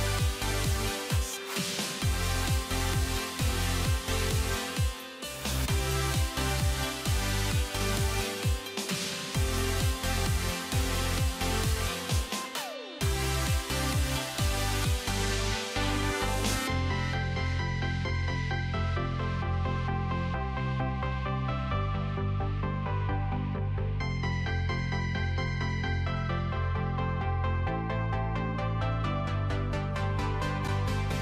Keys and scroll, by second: 30.8 alt+w.